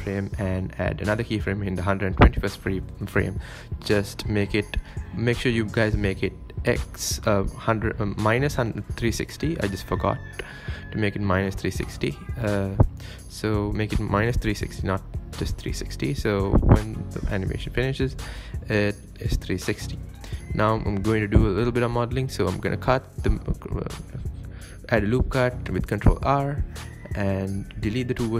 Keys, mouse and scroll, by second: 4.5 space, 8.1-8.4 middle drag, 8.4-8.8 scroll down 4, 8.8-12.2 middle drag, 12.2 KP_7, 12.5 scroll down 2, 12.7 Tab, 13.0 shift+middle click, 13.3 Tab, 13.5 click, 14.6 Tab, 14.7 Tab, 14.9 Tab, 15.3 ctrl+r, 16.0 scroll down 1, 16.2 shift+middle click, 16.6 click, 17.0 click, 17.7 x, 17.9 Tab, 18.1-18.5 middle drag, 18.5 scroll up 4, 18.8-19.5 middle drag, 19.5 scroll down 1, 19.7 scroll up 3, 20.5 scroll up 1, 20.9-21.3 scroll down 2, 21.3-21.8 middle drag, 21.8-22.4 scroll down 1, 22.4 KP_7, 22.7 scroll down 1, 22.9 Tab, 23.3 scroll down 1, 23.6 ctrl+r, 25.1 g, 25.7 g, 27.5-27.9 scroll up 1, 27.9 shift+middle click.